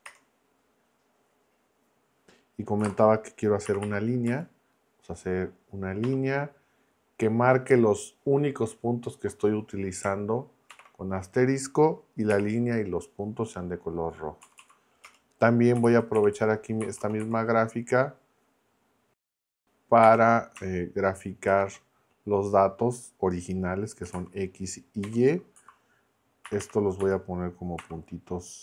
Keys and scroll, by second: 0.0 Return, 2.8 ,, 3.7 ', 4.2 Left, 6.0 -, 10.7 shift+8, 12.3 r, 14.4 Right, 15.0 Return, 15.5-17.7 typing, 20.0 t, 21.5 shift+9, 23.8-26.5 typing, 27.0 Left, 27.8 ..